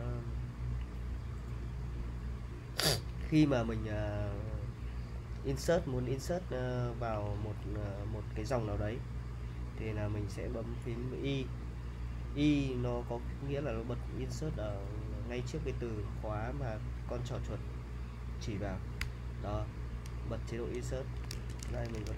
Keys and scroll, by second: 0.8 j, 2.7-4.4 typing, 6.1 l, 7.1 j, 7.7 k, 19.0 i, 20.9-22.1 typing.